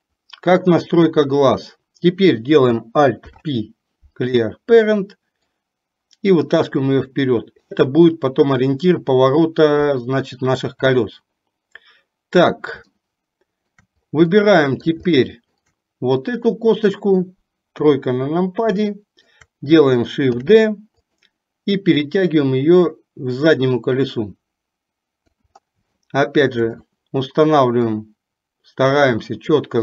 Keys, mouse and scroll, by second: 1.0 click, 5.6-7.8 drag, 13.0 shift+middle click, 14.5 middle click, 15.1 shift+middle click, 16.5 click, 17.9 KP_3, 18.9 shift+middle click, 20.6 shift+d, 22.1-25.5 drag, 26.0 shift+middle click, 28.0-29.8 drag.